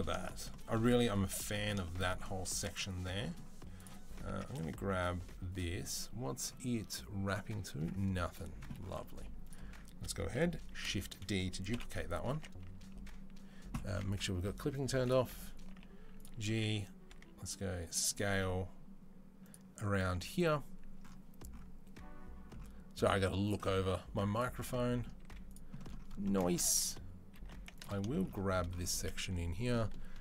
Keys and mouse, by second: 2.6-3.6 middle drag, 3.6 click, 4.1 Tab, 4.1-12.1 middle drag, 8.9 Tab, 10.6 shift+d, 11.5 KP_7, 12.1 Tab, 12.5 a, 14.8 click, 15.5 g, 16.9-30.2 middle drag, 16.9 s, 18.1 g, 23.2 click, 25.0 z, 27.2 2.